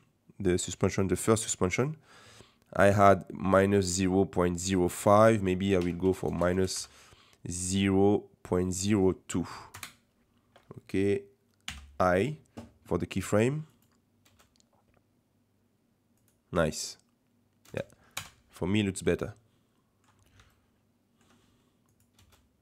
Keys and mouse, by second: 0.4 click, 1.0 click, 1.5 click, 5.0-6.5 drag, 6.5 KP_0, 9.6-10.9 drag, 11.7 i, 13.2 click, 13.7 click, 14.3 space, 16.2 click, 17.8 space, 18.1 KP_0, 19.1-20.2 middle drag, 20.6-21.2 ctrl+drag, 21.9 click, 22.2 space.